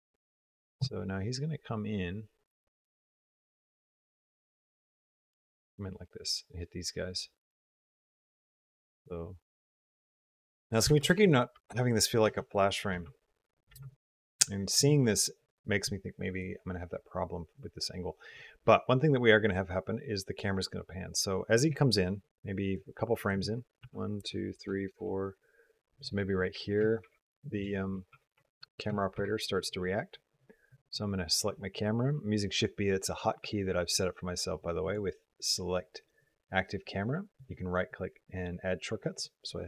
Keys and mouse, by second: 0.4 g, 4.3 g, 10.7-13.5 typing, 11.1 click, 12.3 click, 13.7 click, 14.3 click, 16.3-21.4 drag, 22.7 click, 23.7 Right, 24.1 Right, 24.5 Right, 24.8 Right, 26.8 shift+b, 28.2 Tab, 29.0 shift+b, 34.7-39.1 drag.